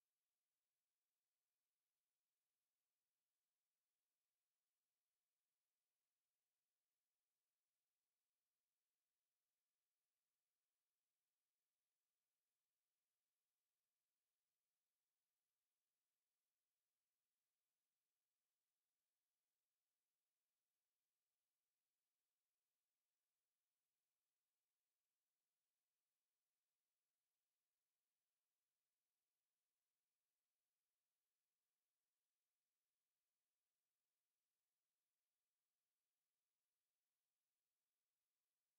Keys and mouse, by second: 10.3-11.8 middle drag, 12.5 KP_5, 15.9 Tab, 16.4-17.7 middle drag, 22.1 middle click, 25.6 a, 26.9 shift+a, 31.5 KP_7, 32.7 KP_5, 36.8 z.